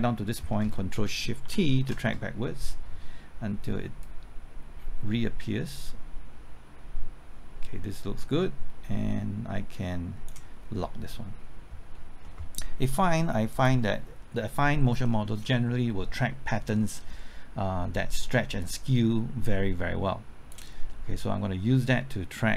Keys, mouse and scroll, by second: 1.4 ctrl+shift+t, 4.0-10.8 drag, 15.0 middle click, 16.9 scroll down 1, 17.7-18.6 scroll up 1, 18.6-20.8 drag, 20.9 middle click, 21.4-22.2 scroll up 1.